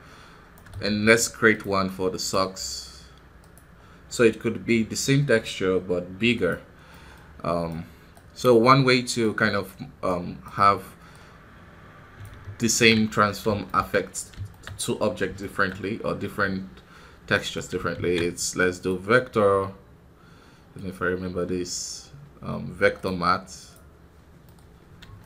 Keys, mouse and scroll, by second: 0.4 right click, 0.8 shift+d, 3.5-6.4 drag, 8.8-12.1 right drag, 12.1-13.2 drag, 13.2-13.6 scroll down 3, 13.6-14.6 shift+middle drag, 14.6 scroll up 4, 15.3-23.5 shift+middle drag, 24.3 middle click, 24.5-24.9 scroll down 4, 25.1 shift+middle click.